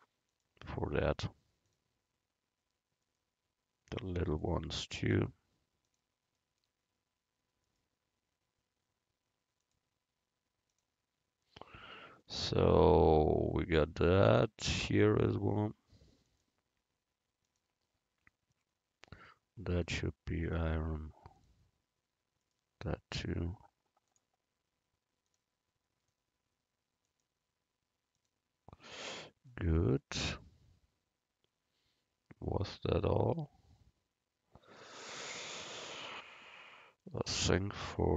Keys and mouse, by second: 0.4-2.2 drag, 3.1-5.0 right drag, 4.4-6.3 drag, 7.9-9.7 right drag, 9.7-11.5 drag, 14.8-18.3 right drag, 16.3-18.3 drag, 19.3-21.0 right drag, 20.5-22.4 drag, 22.6-26.2 right drag, 24.2-26.4 drag, 27.2-29.0 drag, 27.2-29.0 right drag.